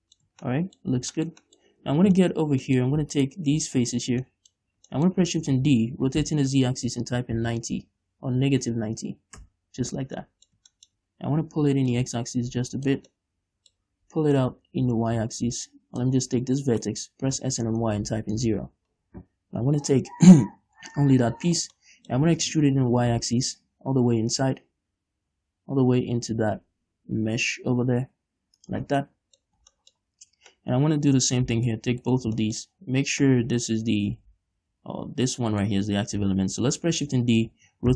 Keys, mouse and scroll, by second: 0.7 Tab, 1.4 scroll down 2, 2.0 scroll up 2, 2.2 Tab, 2.8 scroll up 1, 3.1 middle click, 3.6 alt+right click, 4.2 alt+shift+right click, 4.5 scroll down 1, 4.7 middle click, 5.0 scroll up 1, 5.3 shift+middle click, 5.9 shift+d, 9.9 Return, 10.6-12.3 middle drag, 12.3-13.5 drag, 13.5-15.4 middle drag, 15.4-17.2 drag, 17.2 shift+right click, 17.7 s, 18.9 Return, 20.2 right click, 21.0 l, 22.2 middle click, 22.9 e, 29.1 shift+click, 29.3 scroll down 1, 29.4 scroll up 1, 29.5 middle click, 29.9 scroll up 1, 31.4 middle click, 32.0 alt+right click, 32.8-34.0 shift+middle drag, 34.0 shift+right click, 34.7 ctrl+z, 35.7 shift+right click, 36.0 shift+right click, 37.4 shift+d.